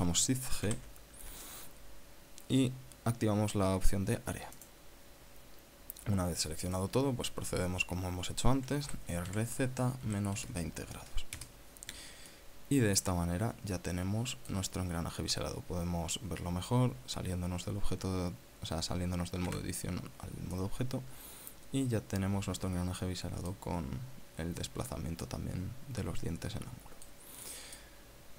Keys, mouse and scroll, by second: 1.4 shift+g, 5.3 click, 6.1 scroll down 2, 7.5-9.3 drag, 9.6 r, 10.1 z, 10.8 KP_Subtract, 11.3 KP_0, 12.1 KP_Enter, 13.1 click, 14.0 scroll down 1, 14.4-15.4 drag, 20.3 Tab, 21.3-24.4 drag, 26.0-28.0 middle drag, 28.2 middle click.